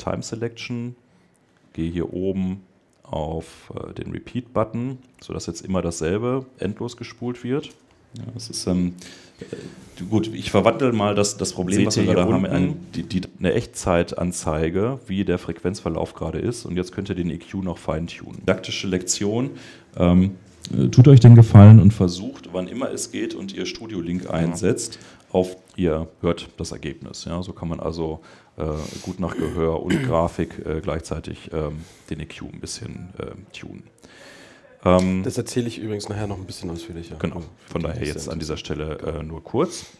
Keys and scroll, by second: 33.3 Escape, 34.5 Escape.